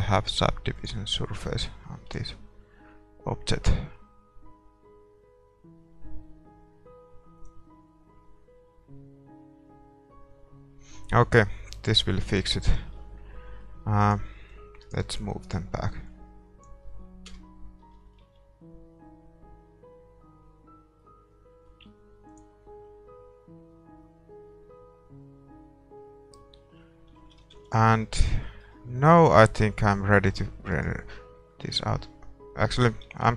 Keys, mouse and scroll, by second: 0.9 click, 1.5-4.4 middle drag, 2.4 shift+z, 7.8-9.8 drag, 11.7 middle click, 13.0 shift+z, 13.4 middle click, 14.0 right click, 16.2-18.0 drag, 16.2-17.3 middle drag, 16.2 right click, 17.3 KP_0, 18.0-22.9 middle drag, 18.5 shift+z, 22.5-27.3 drag, 27.3 shift+z, 28.0 ctrl+s, 28.0-33.3 middle drag, 30.9-32.5 right drag.